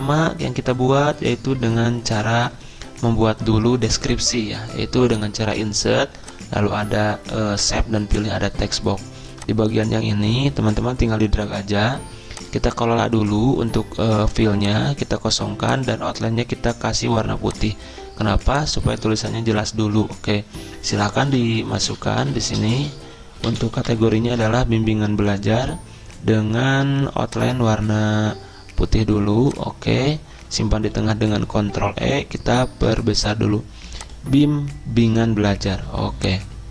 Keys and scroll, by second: 21.1-24.3 typing, 31.0 ctrl+e, 35.7 typing.